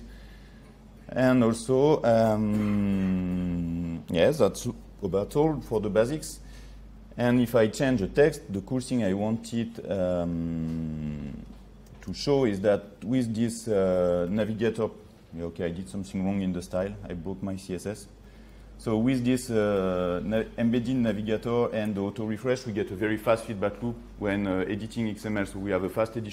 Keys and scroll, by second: 13.9 ctrl+s, 18.4 ctrl+z, 19.9 ctrl+s.